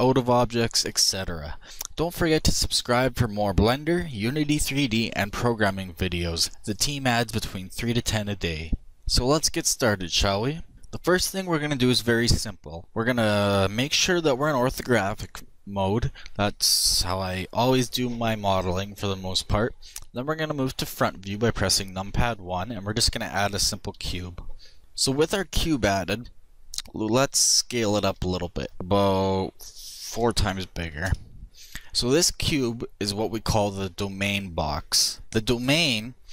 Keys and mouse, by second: 20.5 KP_1, 23.7 shift+a, 24.8-26.9 middle drag, 28.0 s, 31.4-35.2 middle drag.